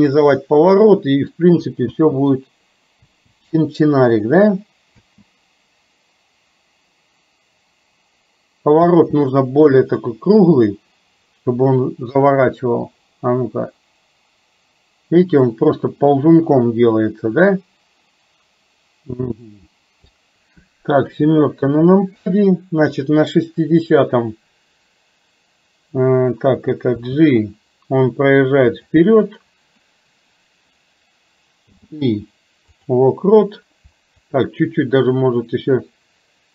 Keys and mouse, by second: 0.8 middle click, 2.0 space, 3.1 space, 4.2 click, 9.0 space, 12.9-20.2 drag, 21.1 KP_7, 23.1 click, 27.1 g, 31.7 i, 34.3-36.5 drag.